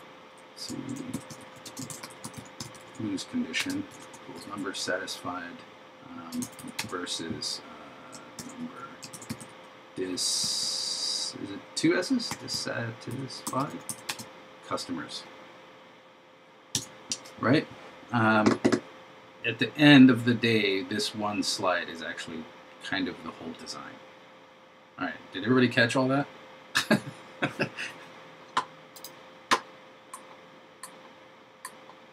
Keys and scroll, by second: 1.2 shift+l, 2.0 shift+c, 4.5 super+Right, 8.4 shift+3, 9.2 shift+d.